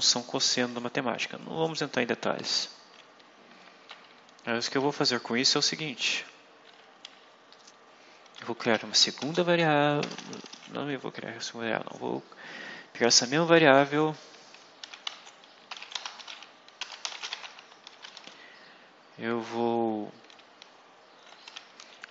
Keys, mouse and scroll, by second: 0.4 click, 2.4 click, 4.4 shift+Home, 6.5 Delete, 8.3-9.9 typing, 14.7-18.1 typing, 21.1-22.1 typing.